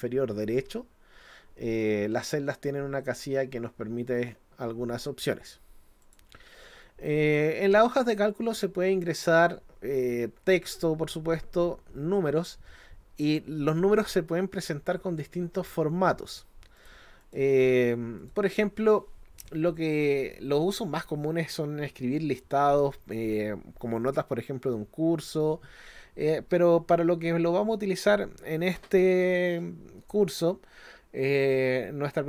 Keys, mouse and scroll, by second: 6.0 click, 7.6-7.9 scroll up 1, 16.8 click, 17.2 click, 18.2 click.